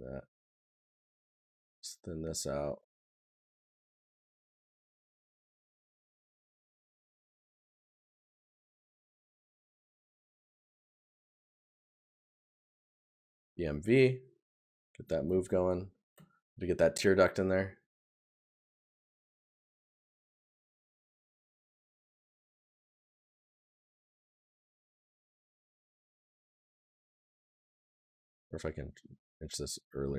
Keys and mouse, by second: 7.4 click, 7.6 right click, 8.1 click, 9.0 right click, 10.4 right click, 16.1 right click, 26.7 right click.